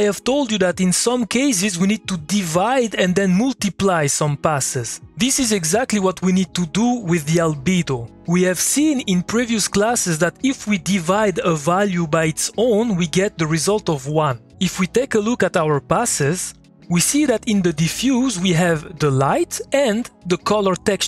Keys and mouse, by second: 15.9 click, 16.5 2.